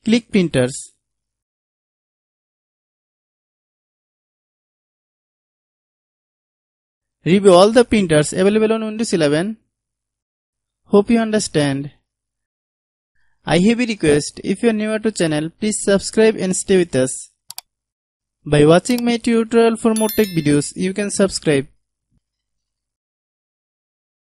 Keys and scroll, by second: 12.3-12.7 typing.